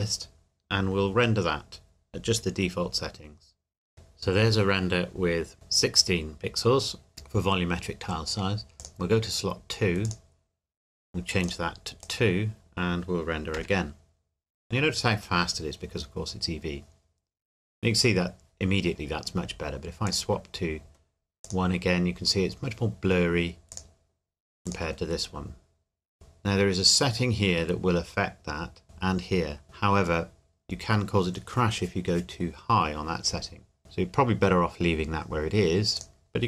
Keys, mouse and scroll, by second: 3.9-5.0 scroll down 1, 8.8 click, 13.5 F12, 20.1 click, 35.9 click.